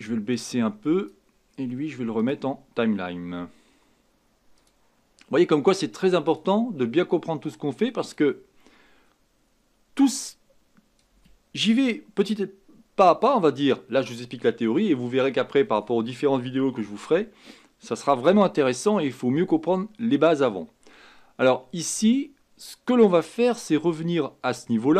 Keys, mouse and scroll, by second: 0.0-19.2 drag, 19.2-22.0 scroll down 2.